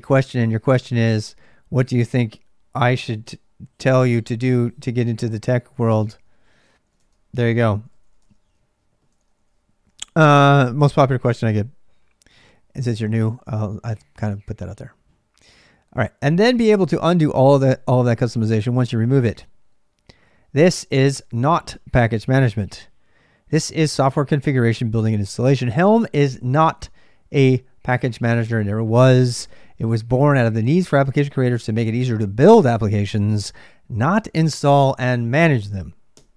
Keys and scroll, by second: 0.0-36.3 typing, 8.9 ctrl+[.